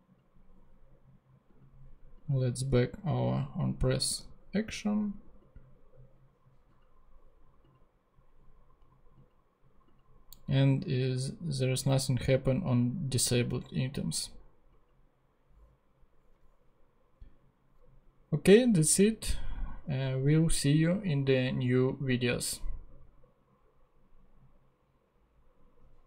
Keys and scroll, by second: 2.9 super+/, 4.1 super+Tab.